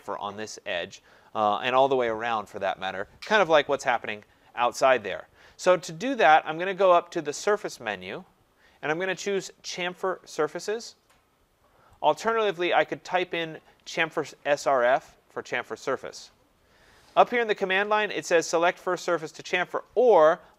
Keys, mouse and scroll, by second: 7.4 click, 12.1 click.